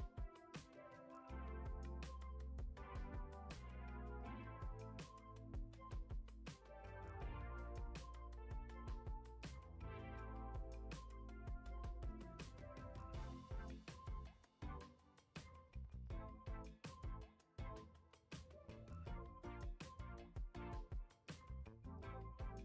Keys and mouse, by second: 1.4 click, 2.0 right click, 3.0 click, 4.1-4.7 shift+middle drag, 7.8 shift+a, 10.6 click, 11.5 Tab, 12.8-13.2 shift+middle drag, 13.8 Tab, 14.2 ctrl+z, 15.5 ctrl+a, 15.9 ctrl+a, 16.4 Tab, 17.6 alt+z, 18.4-20.5 drag, 21.1 alt+z, 21.4 x, 22.0 Tab.